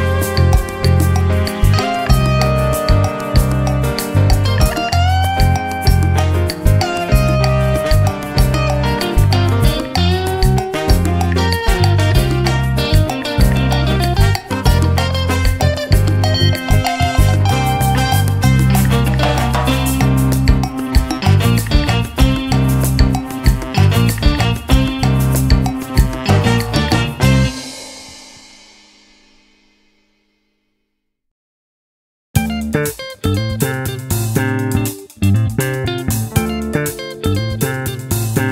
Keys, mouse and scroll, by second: 0.8-1.9 drag, 3.3 ctrl+d, 5.0 click, 5.9-7.0 drag, 7.2-10.8 drag, 11.9 click, 12.6 click, 25.4 click, 32.8-35.9 drag, 36.0 click, 37.3 click, 38.3 click.